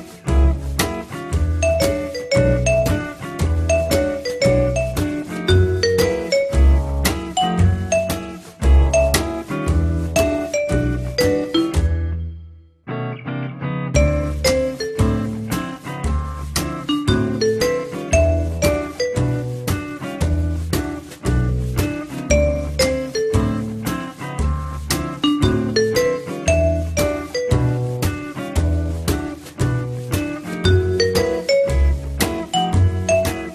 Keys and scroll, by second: 19.2-20.1 typing, 26.2 2, 26.4 Return.